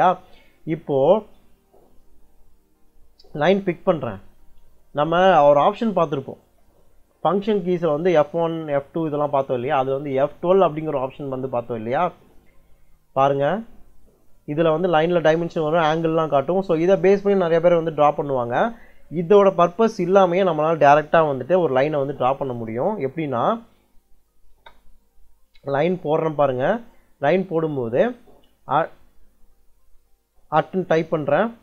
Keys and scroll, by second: 6.3 ctrl+l, 11.7 F12, 22.7 Escape, 24.3 space.